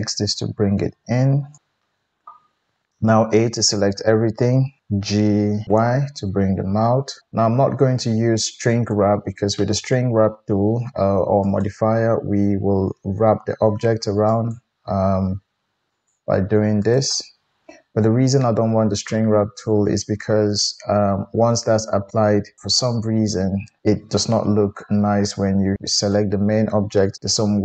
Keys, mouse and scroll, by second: 1.6 alt+z, 1.6-5.0 middle drag, 3.1 a, 5.0 g, 11.4-16.1 drag, 16.1-25.8 middle drag, 25.8 Tab, 25.9 click, 27.1 Tab.